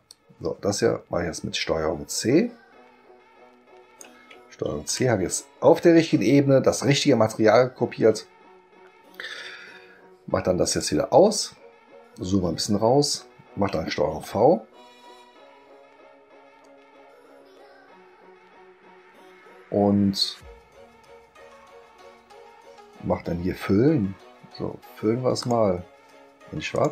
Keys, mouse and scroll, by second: 0.1-4.0 drag, 4.8 ctrl+c, 10.7 click, 12.2 ctrl+scroll down 2, 12.4 ctrl+middle click, 14.1 ctrl+v, 25.4 click, 26.7 click.